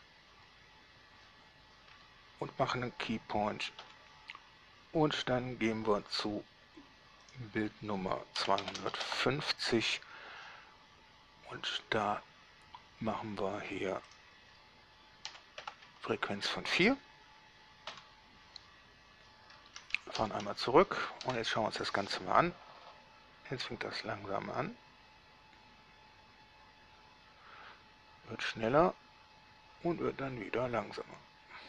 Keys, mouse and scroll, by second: 0.0 Return, 4.1 i, 7.5 click, 8.6 2, 8.8 5, 9.0 0, 9.3 Return, 14.4 click, 15.5 4, 15.8 Return, 18.2 i, 20.4 shift+Left, 21.4 alt+a.